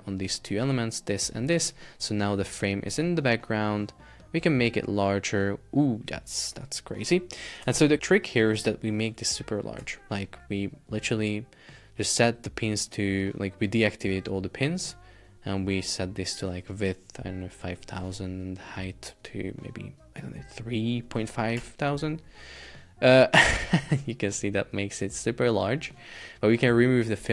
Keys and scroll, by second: 0.6 shift+super+4, 1.2 space, 1.6 Escape, 6.5 alt+h, 6.7 alt+v, 7.8 super+Tab, 18.0 Return, 21.6 Return.